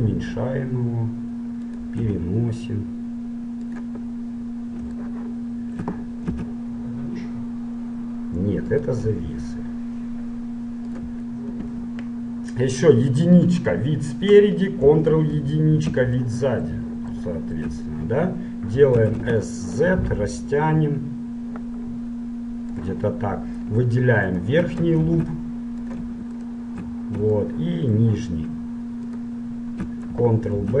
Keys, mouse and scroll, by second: 0.0 s, 2.1 g, 4.3-7.1 middle drag, 6.6 s, 9.3 g, 11.7 KP_1, 12.5 middle click, 13.6 KP_1, 15.3 ctrl+KP_1, 16.4-20.3 middle drag, 19.2 s, 23.3-24.4 middle drag, 24.4-26.4 right drag, 25.2 ctrl+Tab, 26.5-27.5 right drag, 27.5-29.3 middle drag, 29.3-30.8 right drag.